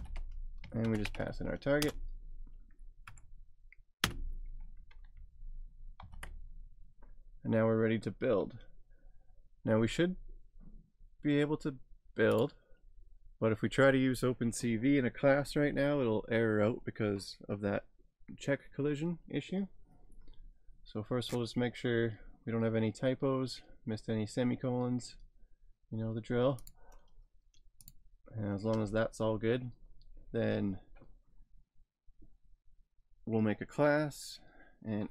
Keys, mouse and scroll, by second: 0.0-1.2 typing, 1.8 Return, 3.1 Right, 4.0 ;, 6.0 ctrl+s, 7.4 scroll down 2, 8.7 scroll up 3, 12.3 click, 21.7 scroll down 3, 23.0 scroll up 3, 24.7 scroll up 2, 26.5 scroll, 26.6 click, 28.7 Return.